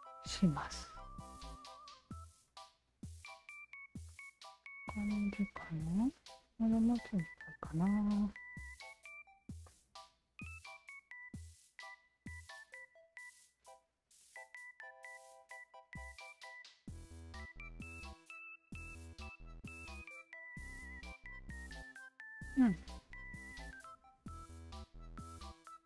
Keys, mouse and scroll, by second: 1.4 alt+shift+click, 2.7-5.5 alt+drag, 5.9 alt+click, 7.1 alt+click, 7.6 r, 8.2-9.4 alt+shift+drag, 9.7 alt+click, 10.0 alt+right drag, 10.5 click, 10.5 r, 12.0 alt+right click, 12.6 alt+click, 14.2 e, 15.0-17.0 shift+drag, 17.4 click, 17.8 alt+right drag, 18.6-18.9 alt+drag, 19.2 alt+right click, 19.4-22.6 drag, 22.9 click, 24.4-25.0 alt+right drag, 25.3 alt+click.